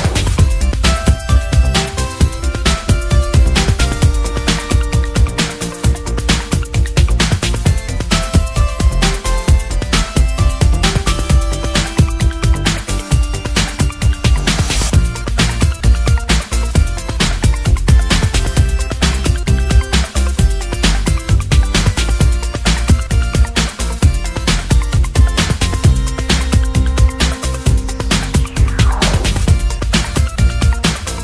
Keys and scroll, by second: 4.3 Return, 5.1-7.9 typing.